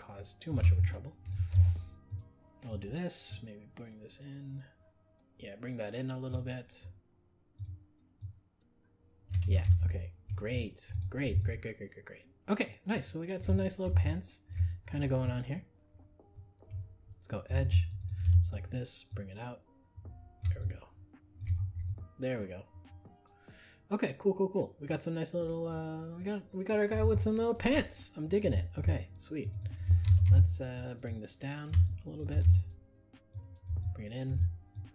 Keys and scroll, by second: 9.7 ctrl+z.